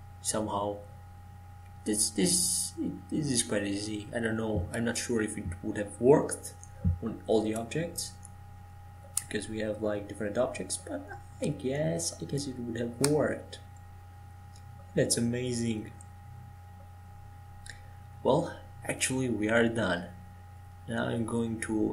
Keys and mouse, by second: 2.5 g, 11.1-12.1 middle drag, 12.1 right click, 12.8-15.2 middle drag, 15.2 right click, 15.6 middle click, 15.9 click, 17.6-21.9 drag.